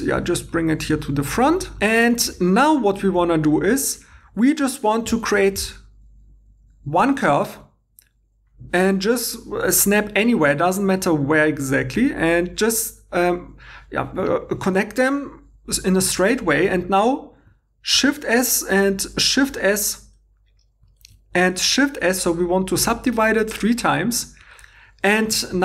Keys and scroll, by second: 17.9 shift+s, 19.0 shift+s, 21.0 shift+s, 25.3 2.